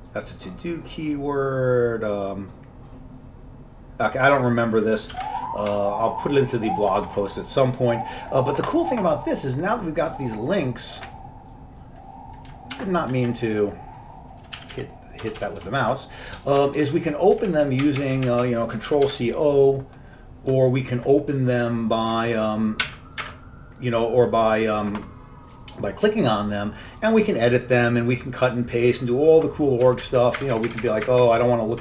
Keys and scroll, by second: 5.2 ctrl+g, 5.8 q, 7.0 ctrl+g, 12.8 ctrl+w, 13.3 alt+Tab, 14.7 Left, 14.8 Left, 15.3 BackSpace, 15.5 BackSpace, 15.7 BackSpace, 15.9 Delete, 16.7 Down, 16.9 Down, 17.5 Down, 18.0 Right, 18.1 Right, 18.2 Right, 18.4 Right, 19.0 ctrl+c, 19.2 ctrl+o, 19.8 Left, 19.8 Delete, 19.8 Down, 19.8 Right, 19.8 ctrl+c, 19.8 ctrl+o, 19.8 BackSpace, 23.0 ctrl+w, 23.3 alt+Tab, 29.9 Right, 30.1 Down, 30.5 Up, 30.6 Up, 30.8 Up, 30.9-31.8 Up.